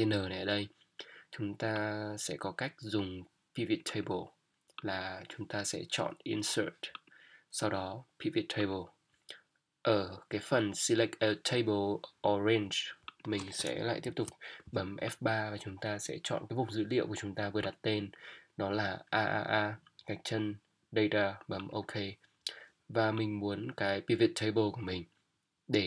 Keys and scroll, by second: 14.0 F3.